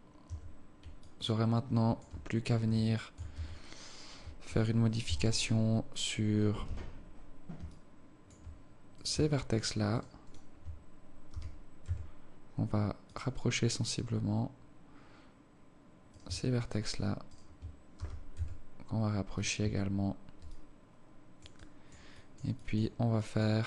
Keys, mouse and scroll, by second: 0.4 Tab, 1.1 alt+click, 2.9 alt+shift+click, 3.4 Tab, 3.9-4.2 scroll up 2, 5.1 a, 6.7 z, 7.8 alt+click, 9.0 right click, 9.6 shift+right click, 10.0 right click, 10.3 shift+right click, 11.4 g, 16.2 right click, 16.7 shift+right click, 17.0 shift+right click, 17.4 shift+right click, 18.0 g, 19.7 Tab, 20.6 alt+click, 21.6 alt+click, 22.2 alt+click, 22.6 alt+click, 23.2 alt+click.